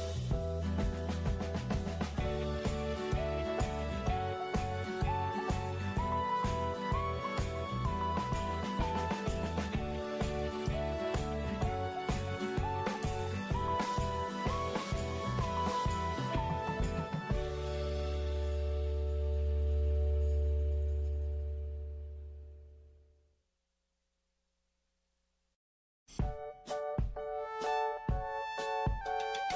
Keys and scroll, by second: 0.0-0.5 typing, 2.9-3.5 typing, 5.5-6.4 typing, 12.7 alt+space, 22.6 ctrl+0.